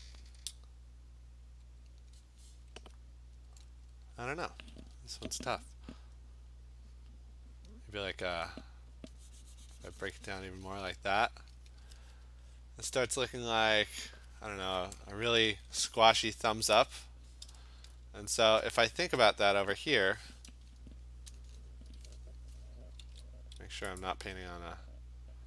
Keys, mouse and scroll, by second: 4.4 [, 4.8 [, 5.1 [, 5.4 [, 10.9 click, 11.8 ], 12.1 ], 12.6 click, 14.1 click, 16.0 ], 16.8 ctrl+Tab, 17.9-19.8 scroll, 21.8 click, 23.1 ctrl+z, 24.0 click.